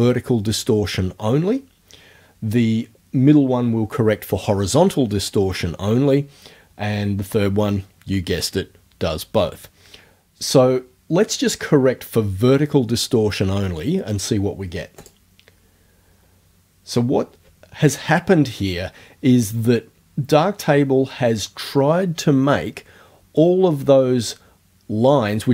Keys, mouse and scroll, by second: 15.0 click.